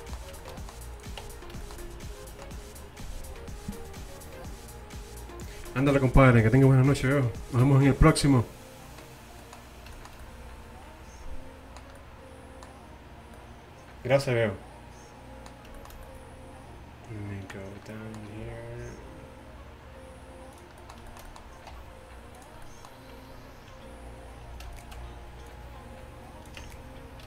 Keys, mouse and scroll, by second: 1.1 click, 1.3 Tab, 2.0 click, 9.5 middle click, 10.1-11.4 middle drag, 15.7-16.8 middle drag, 18.4 e, 21.9 r, 24.8-26.7 right drag, 25.5-26.7 drag, 26.7 Tab, 26.8 click.